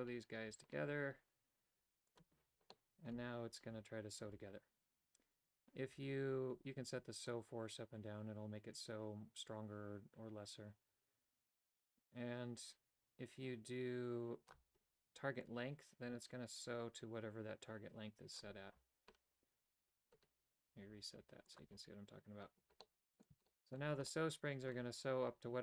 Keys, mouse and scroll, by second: 2.1 click, 2.8 middle click, 7.3-14.6 drag, 15.5-18.4 drag, 21.5 click, 22.9 middle click, 23.5 shift+middle click, 24.1 middle click.